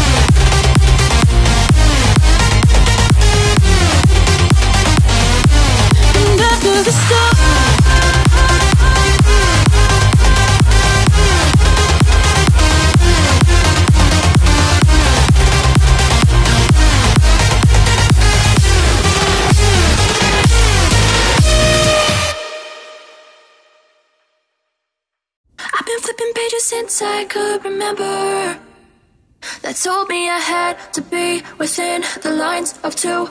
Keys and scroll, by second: 12.9 ctrl+j, 15.1 ctrl+z, 32.8 ctrl+o.